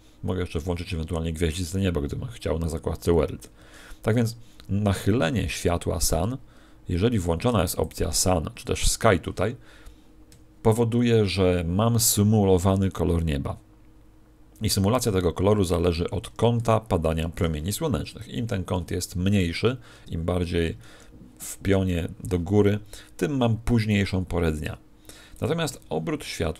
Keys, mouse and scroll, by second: 3.4 Escape, 4.5 r, 7.8 click, 15.9 Escape, 16.5 r, 17.4 click, 20.6 Escape, 25.4 click.